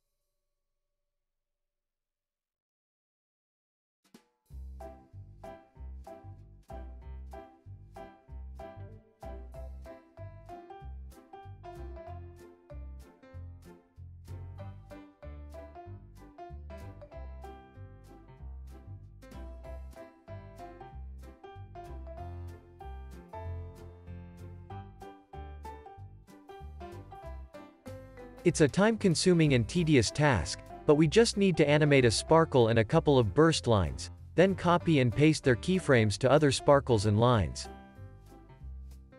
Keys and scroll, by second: 2.0 alt+z, 3.2 x, 9.5 z, 10.5 x, 11.0 z, 16.5 o, 18.6 i, 19.3 super+s, 21.0 space, 25.7 o, 29.2 super+s, 32.8 super+s, 35.3 super+c, 36.5 super+v, 36.8 super+s.